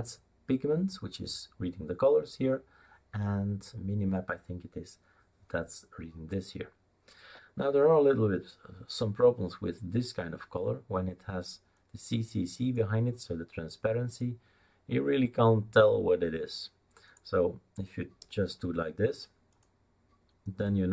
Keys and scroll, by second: 18.2 BackSpace, 18.4 BackSpace.